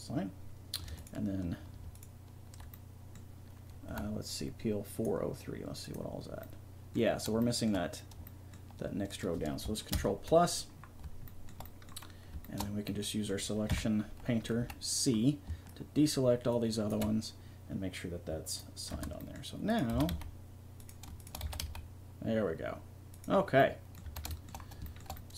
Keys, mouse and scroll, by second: 0.8 click, 2.2 click, 3.9 a, 6.4 middle click, 7.0 click, 7.3 middle click, 8.8-9.9 middle drag, 9.9 ctrl+KP_Add, 10.3 middle click, 11.2 middle click, 12.1 middle click, 13.7 KP_3, 14.6 c, 17.0-18.2 drag, 18.9 Tab, 19.6-21.0 middle drag, 19.9 r, 21.4 r, 24.0 a.